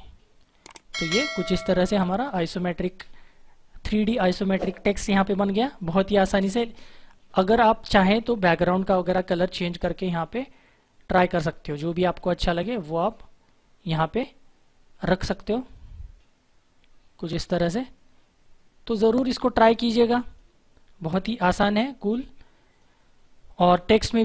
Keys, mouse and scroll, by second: 8.6 click, 13.0 click, 15.6 click.